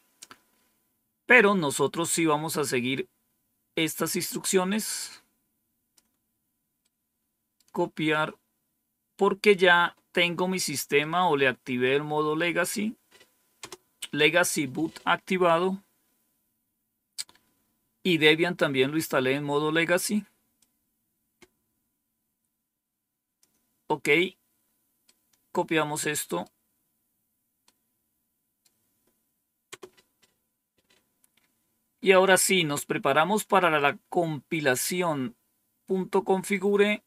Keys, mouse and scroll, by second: 2.4 scroll up 2, 4.7-5.9 drag, 6.7 right click, 9.3 click, 10.9-12.3 right drag, 13.5 Return, 16.3-17.4 scroll down 1, 20.5-23.3 drag, 24.9-26.3 right drag, 27.5-28.5 right drag, 29.6 Return, 34.3 scroll down 2, 36.4-37.0 drag.